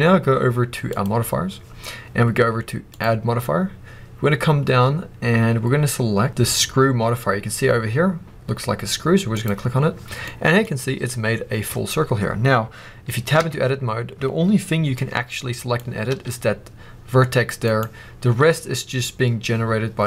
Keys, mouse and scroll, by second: 0.8 click, 2.8-10.2 drag, 10.2-13.3 middle drag, 13.3 Tab, 14.8 click, 16.0 g, 17.7 right click.